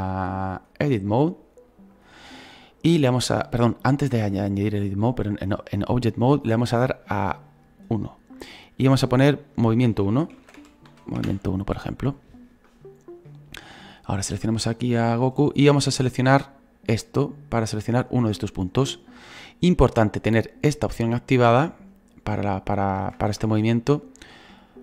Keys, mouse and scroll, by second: 2.0-13.7 drag, 13.7-15.2 right drag, 15.2-17.0 drag, 17.9-20.7 right drag, 20.7-23.2 drag, 23.2 ctrl+z, 23.7 scroll down 2, 24.5-24.8 drag.